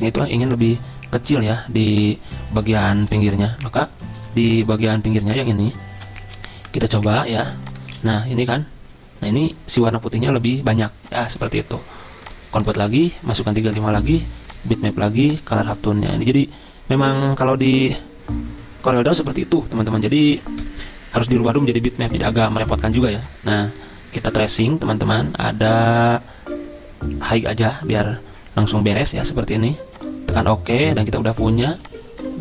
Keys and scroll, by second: 3.2 F6, 4.8 z, 6.4 ctrl+z, 7.2 ctrl+z, 8.1 g.